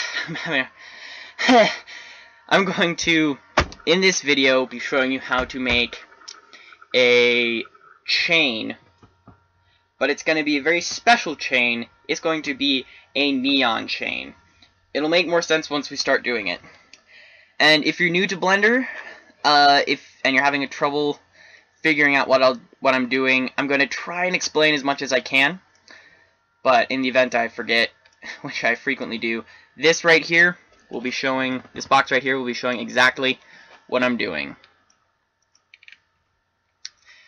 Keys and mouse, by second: 19.3-23.3 middle drag, 25.6-30.1 middle drag, 31.9 a, 33.6 l, 34.0 a, 36.1 a.